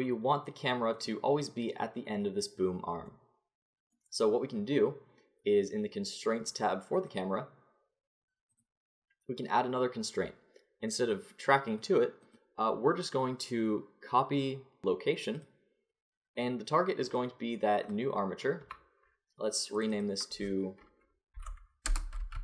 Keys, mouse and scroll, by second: 1.0-2.9 middle drag, 7.1-10.4 drag, 11.7-14.2 drag, 14.8 click, 17.1-22.0 drag.